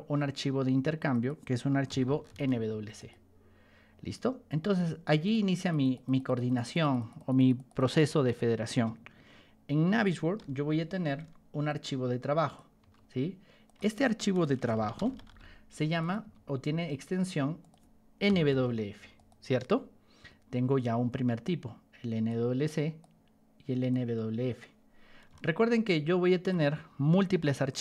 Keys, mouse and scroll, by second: 0.3 middle click, 1.0 click, 1.6-2.7 typing, 2.9 click, 5.2 click, 5.5 click, 5.8 click, 6.0 click, 6.2 click, 6.4 click, 6.6 click, 6.7 click, 6.9 click, 7.1 click, 7.3 click, 7.5 click, 7.7 click, 7.9 click, 8.2 click, 10.3 p, 11.6 ctrl+click, 12.7 t, 13.6 click, 14.3-16.2 typing, 15.9 click, 17.5 click, 18.0-18.9 typing, 19.1 click, 21.4 click, 22.6 click, 23.8 click, 25.7 ctrl+shift+click.